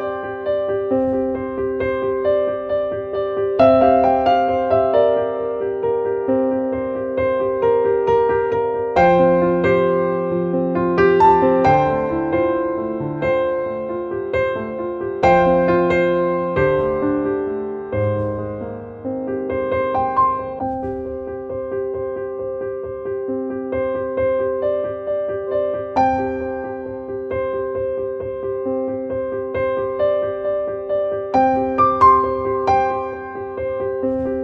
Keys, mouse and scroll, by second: 0.9 click, 1.8-3.5 drag, 5.1 click, 5.4 click, 6.0 click, 6.7 click, 7.4-9.1 drag, 10.3 click, 10.3 click, 12.3 click, 13.1 click, 16.1-17.8 drag, 18.5 click, 20.4 click, 21.3 click, 22.3 click, 24.4 click.